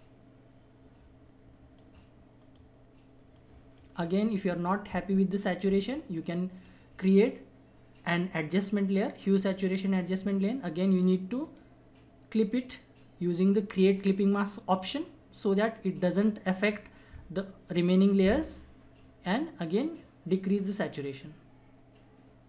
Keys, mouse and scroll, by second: 6.5 click, 9.4 click, 11.4 right click, 14.7 click, 14.8 click, 20.3-22.4 drag.